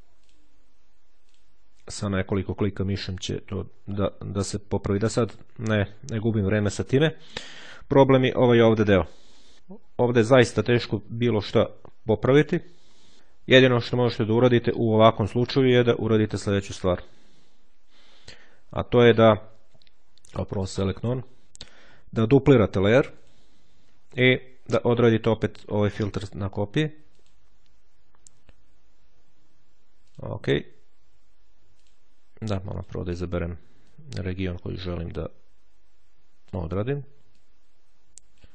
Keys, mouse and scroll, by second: 0.1 click, 1.1 click, 7.2-7.8 ctrl+scroll down 2, 8.1-8.7 ctrl+scroll up 2, 12.8 ctrl+z, 15.7-16.3 ctrl+scroll down 2, 17.9-18.5 ctrl+scroll down 2, 20.1 click, 21.0 click, 22.5-23.7 drag, 24.1 click, 25.8 click, 27.0 click, 29.9 click, 31.6 click, 32.7 click, 33.8-36.9 drag, 37.3-38.5 drag.